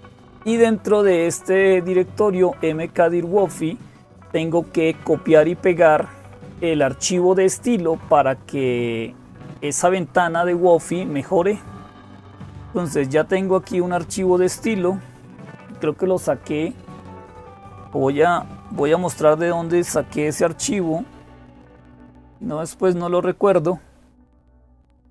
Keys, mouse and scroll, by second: 0.0-25.1 typing, 13.3 click, 24.8 click.